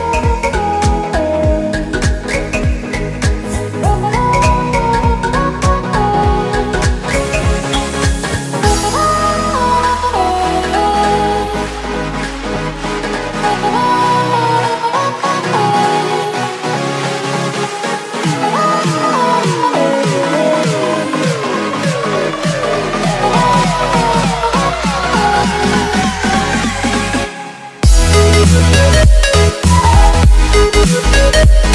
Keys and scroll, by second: 2.8 x, 5.3 ctrl+z, 6.4 z, 10.8 z, 30.6 Return.